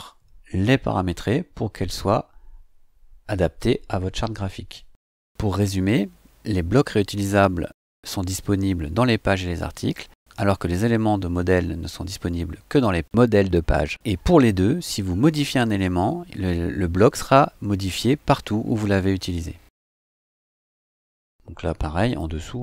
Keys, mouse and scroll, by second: 22.0 click.